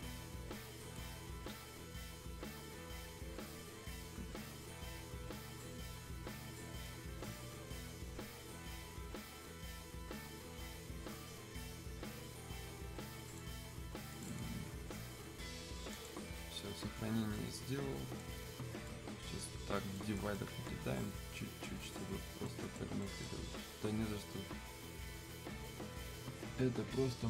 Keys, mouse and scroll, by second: 5.7-6.7 scroll up 1, 6.8-14.1 drag, 17.3-23.2 right drag.